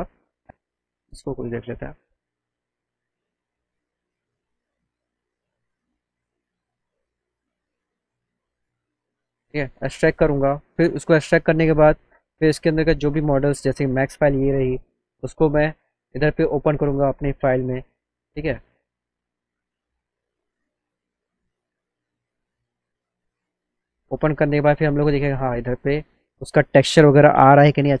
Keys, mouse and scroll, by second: 0.9 click, 1.2 click, 3.5 click, 5.6 click, 10.6 click, 11.4 click, 11.6 click, 13.7 click, 14.7 click, 15.7 click, 17.1 click, 17.8 click, 19.6 click, 20.5 click, 21.3 click, 22.4 click, 25.1 z, 25.6 alt+middle click.